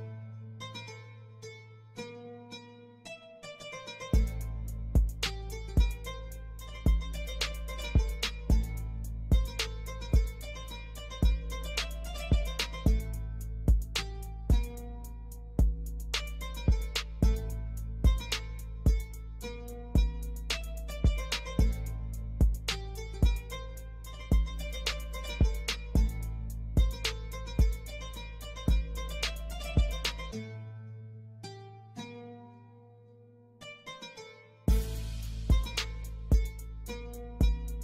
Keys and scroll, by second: 0.5 F3, 4.4 Escape, 8.6 F3, 10.9 ctrl+g, 11.7 ctrl+g, 12.6 F4, 15.5 F2, 17.0 F3, 20.2 shift+F2, 21.1 shift+Page_Up, 21.4 F3, 22.2 Escape, 28.8 shift+F2, 29.1 F3, 31.5 F2, 34.8 F4.